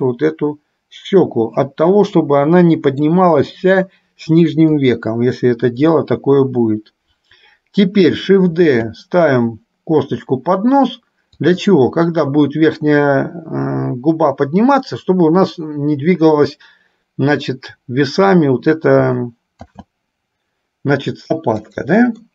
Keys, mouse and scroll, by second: 4.8 KP_1, 8.8 shift+d, 19.9 shift+d.